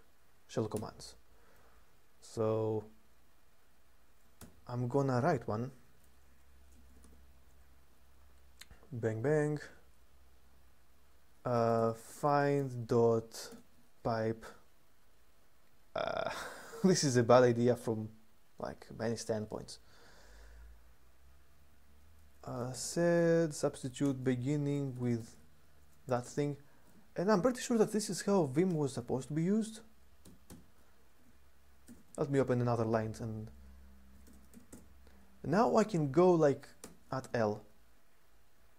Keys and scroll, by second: 0.5 u, 3.3-4.1 typing, 6.7 typing, 11.0-12.3 typing, 13.3 typing, 22.0-26.0 typing, 26.6 Escape, 28.2-31.6 typing, 33.8-34.7 typing, 36.6-36.9 typing.